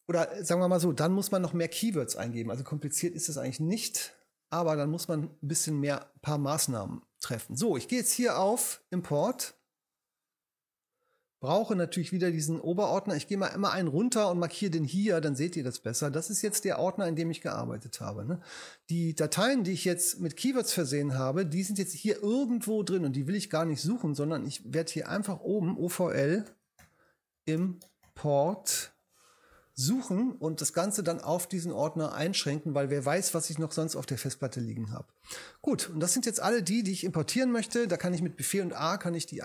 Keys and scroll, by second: 26.2-29.2 typing, 37.3 super+a.